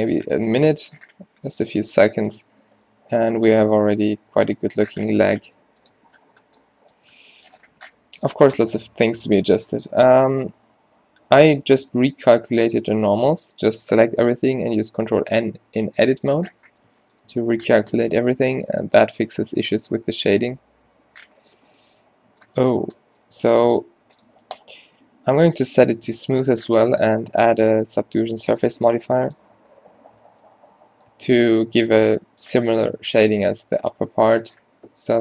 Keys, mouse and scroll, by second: 0.3 g, 2.0 ctrl+r, 3.3 click, 3.8 g, 6.1 Tab, 8.5-9.8 drag, 9.6 Tab, 9.8 a, 10.0 a, 11.0 ctrl+n, 13.2 n, 15.9 Tab, 16.8 Tab, 17.4 Tab, 18.1 Tab, 19.2 Tab, 19.8 Tab, 20.6 g, 21.5 g, 22.1 g, 23.5 g, 24.4 Tab, 27.5 a, 29.7 a, 35.1 Tab.